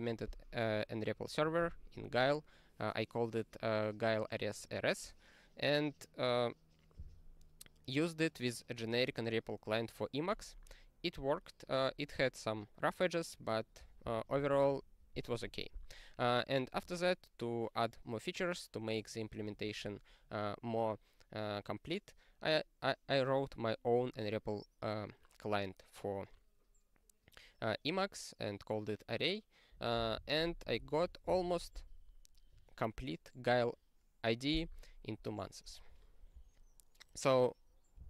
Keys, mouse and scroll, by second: 1.6 ctrl+g, 14.3 ctrl+n, 32.2-35.4 scroll down 16, 35.4 scroll down 12.